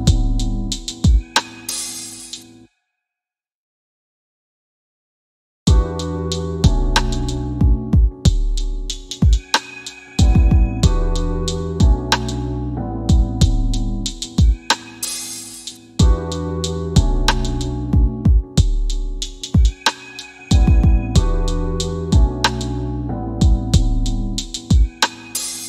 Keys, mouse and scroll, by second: 0.2 scroll up 1, 13.6 scroll up 1, 14.8 click, 15.7 w, 16.6 scroll up 1, 17.6 click, 24.4 click.